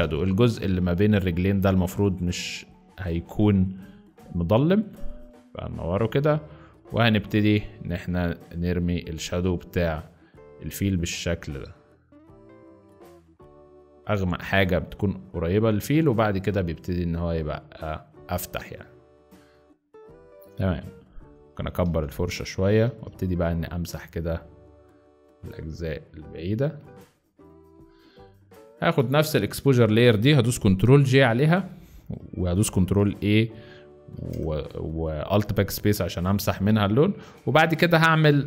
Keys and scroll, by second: 28.7 z, 30.8 ctrl+j, 32.2 ctrl+a, 34.2 alt+BackSpace, 37.0 ctrl+d, 37.4 ctrl+z.